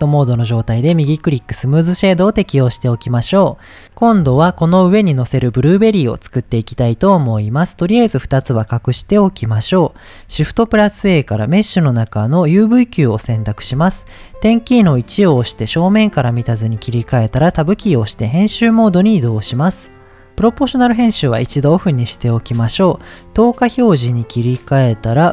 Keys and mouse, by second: 0.9 right click, 7.8 click, 8.8 h, 10.7 shift+a, 14.8 KP_1, 17.6 Tab, 21.2 click, 23.4 click.